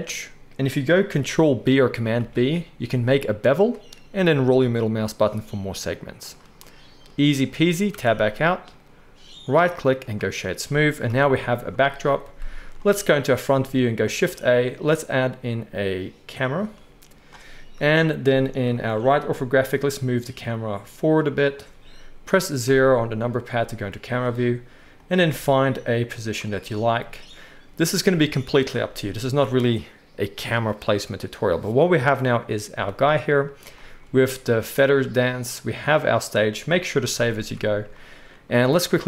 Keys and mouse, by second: 0.6 middle click, 1.4 ctrl+middle click, 2.1 ctrl+b, 5.6-9.4 middle drag, 7.9 Tab, 9.4-12.6 right drag, 11.0 KP_1, 12.6 shift+click, 12.6 right click, 12.8-13.5 drag, 13.5 shift+right click, 13.6 shift+click, 13.7-17.8 shift+right drag, 14.1 shift+a, 17.7 KP_3, 17.8 middle click, 17.9-18.9 right drag, 18.9-20.7 shift+middle drag, 19.5 g, 20.7-22.7 right drag, 22.6 KP_0, 22.7 middle click, 22.9-36.8 right drag, 24.1 g, 25.1 g, 37.0 ctrl+s, 37.2 ctrl+s, 37.4 ctrl+s.